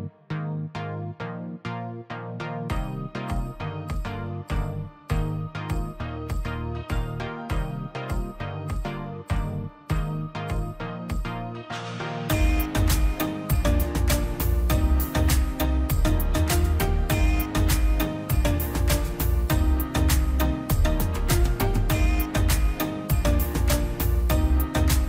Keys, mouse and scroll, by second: 1.1 Escape, 1.3 space, 1.4 click, 3.4 click, 6.1 Escape, 7.1 space, 7.3-12.0 drag, 11.9 Caps_Lock, 16.4-17.7 drag, 17.7 scroll down 1, 18.6 click, 18.7-19.0 scroll down 1, 19.2 middle click, 19.4 scroll up 1, 19.6 click, 20.0 Delete, 20.2 scroll down 1, 20.4 middle click, 20.9-21.2 scroll up 1, 21.7 middle click, 21.9 scroll up 1, 22.2 click, 24.2 scroll down 1.